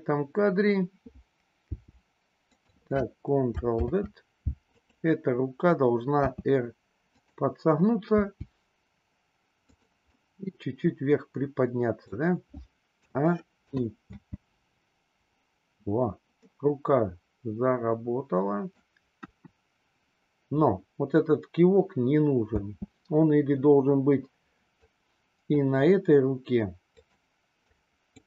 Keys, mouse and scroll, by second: 1.6 g, 3.7 ctrl+z, 4.6 click, 6.1 r, 8.1 g, 10.1-12.4 middle drag, 12.9 a, 13.6 i, 14.0 space, 16.5-18.9 middle drag, 19.3 KP_1, 22.5 space, 24.9-25.6 drag, 26.9 click, 27.6-28.0 drag.